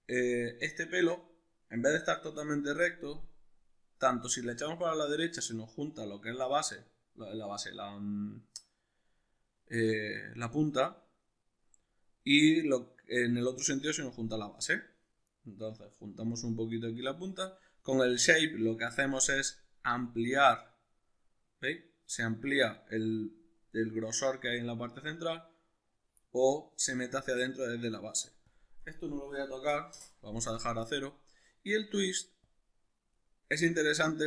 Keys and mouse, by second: 4.9-34.2 drag, 30.0 Return.